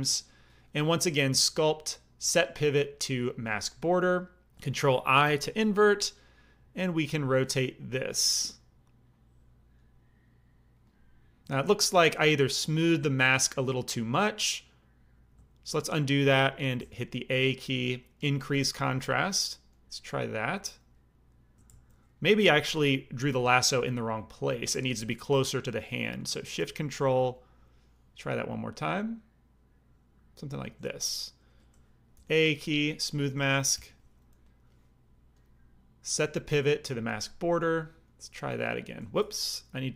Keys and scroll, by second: 5.2 ctrl+i, 11.6 ctrl+z, 15.3 ctrl+z, 16.7 a, 21.6 ctrl+z, 23.4 alt+m, 32.1 a, 33.7 shift+r, 39.1 ctrl+z, 39.9 ctrl+i.